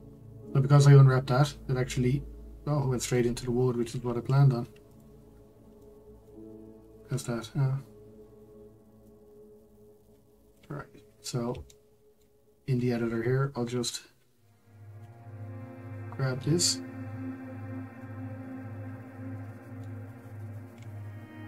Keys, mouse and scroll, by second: 0.6 scroll up 3, 4.2-5.0 scroll down 1, 5.0 click, 5.8-9.3 shift+middle drag, 9.3-15.0 drag, 15.0 l, 17.6 scroll, 18.0-21.4 middle drag.